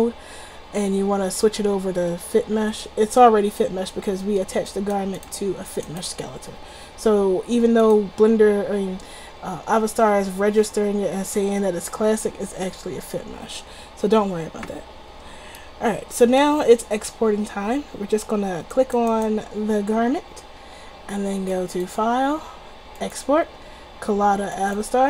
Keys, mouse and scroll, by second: 4.8-7.6 drag, 7.9-9.6 drag, 21.1 middle click, 21.6-23.3 drag.